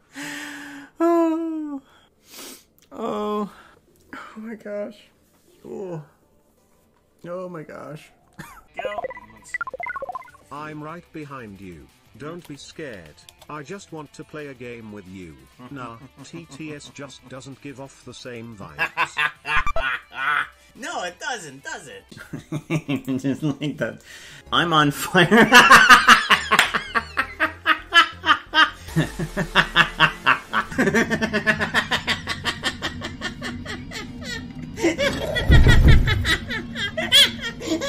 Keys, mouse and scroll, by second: 11.7-13.8 drag.